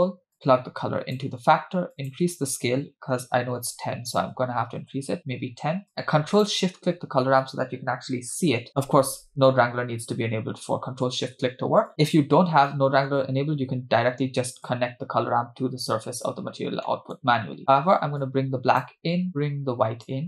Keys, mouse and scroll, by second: 0.4 click, 2.0-4.9 drag, 5.9 click, 6.6 ctrl+shift+click, 11.9 click, 12.1-12.6 scroll down 2, 12.7 middle click, 14.6 click, 15.1-16.3 drag, 16.8 middle click, 17.3-18.2 scroll up 3, 18.2-18.8 drag, 19.3-20.1 drag.